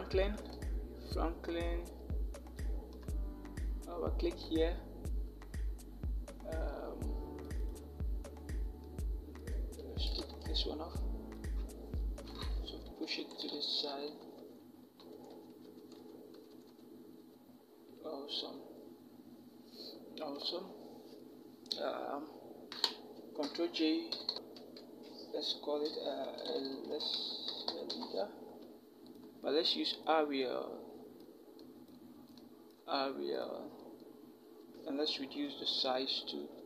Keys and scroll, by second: 10.1 BackSpace, 11.3 BackSpace, 12.5 shift+Left, 12.7 shift+Left, 12.8 shift+Left, 13.0 shift+Left, 13.6 shift+v, 13.8 shift+Left, 15.2 shift+Left, 15.8 shift+Left, 16.3 shift+Left, 17.0 shift+Left, 23.2 ctrl+j, 23.9 Down, 24.1 Down, 24.3 Down, 26.1-27.7 typing, 34.9 ctrl+t.